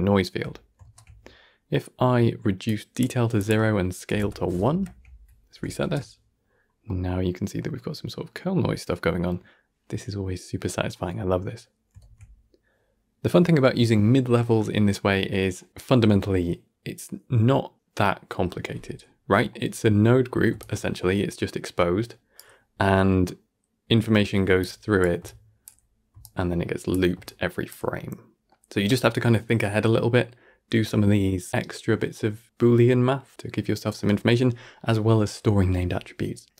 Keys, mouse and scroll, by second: 0.7 shift+space, 2.5-4.6 drag, 4.6 shift+Left, 5.7 shift+space, 6.3-6.8 scroll down 1, 6.8-11.9 middle drag, 11.9 shift+space, 14.0-14.6 middle drag, 14.9-17.2 middle drag, 17.2-18.2 scroll down 1, 18.2-18.7 scroll down 1, 19.2-20.4 middle drag, 20.4 d, 28.4 middle click, 29.0 scroll down 2, 29.2-31.8 middle drag, 33.8-34.3 middle drag, 34.3-36.5 scroll up 1, 36.5 scroll up 1.